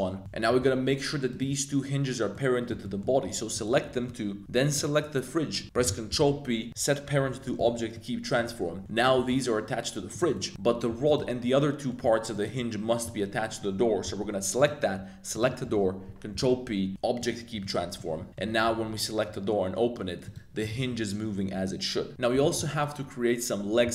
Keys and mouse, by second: 0.2 middle click, 1.3 shift+click, 2.3-2.7 middle drag, 2.8 middle drag, 3.7-4.1 middle drag, 4.7 shift+click, 6.1 super+p, 7.9-8.4 middle drag, 8.9 click, 9.1 g, 10.3 middle drag, 11.0 shift+click, 11.4 middle click, 14.0 g, 14.6 click, 15.3 shift+click, 16.3 super+p, 17.6-18.0 middle drag, 18.3 middle click, 18.6 r, 18.7 z, 20.2 click, 20.6 r, 20.7 z, 22.4 middle click.